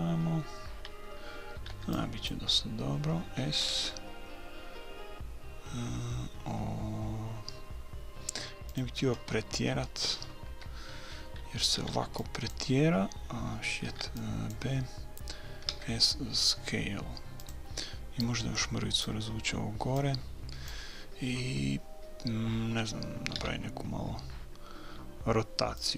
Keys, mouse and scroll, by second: 1.6 a, 1.7 b, 3.6 s, 9.5-12.4 middle drag, 10.5 a, 11.8 b, 13.9 b, 15.7 s, 18.2-19.9 drag, 20.0-21.8 drag, 23.4 r.